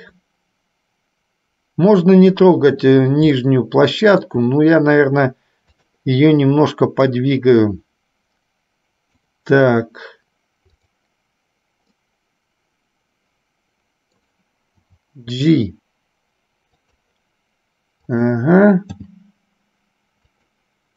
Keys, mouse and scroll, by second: 3.5-4.5 shift+middle drag, 6.0 click, 7.5-9.5 drag, 10.8 click, 12.0-14.3 middle drag, 15.1 g, 18.3 click, 19.0 g.